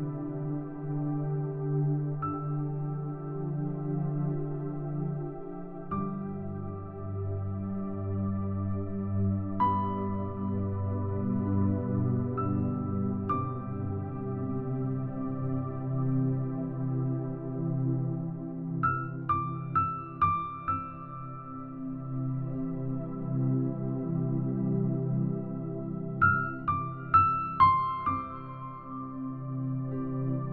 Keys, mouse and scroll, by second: 0.0 middle click, 0.0-0.9 scroll down 4, 0.9-1.3 scroll up 2, 2.3 click, 3.7-5.3 drag, 5.6 middle click, 6.1 click, 7.2-8.3 drag, 8.6 middle click, 9.2 click, 10.1 click, 11.3 middle click, 11.7 click, 13.0 click, 13.9 middle click, 14.4 click, 15.4 click, 16.7 click, 17.5-18.9 drag, 19.5 click, 20.6 click, 21.5 middle click, 21.5-22.9 scroll down 3, 22.5 middle click, 23.4 middle click, 23.9-24.4 scroll up 2, 24.4 click, 25.3 click, 26.3 click, 29.0-29.3 scroll up 1, 29.1-30.5 middle drag, 29.3-30.5 scroll down 1.